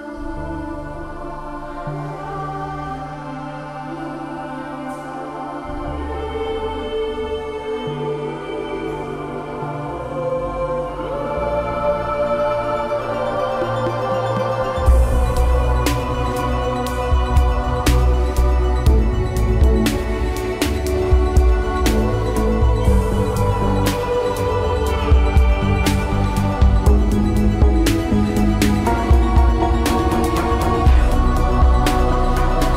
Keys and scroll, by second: 5.4 ctrl+j.